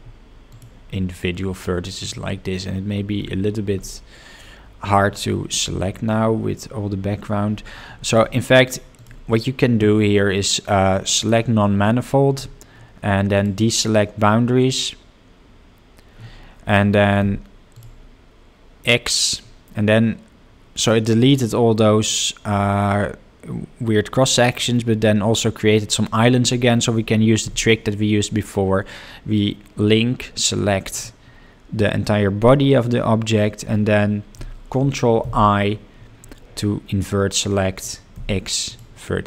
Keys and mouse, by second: 2.0 click, 3.8-4.9 middle drag, 9.0-12.0 drag, 15.7 click, 22.0-24.5 middle drag, 28.9 l, 31.9-35.6 middle drag.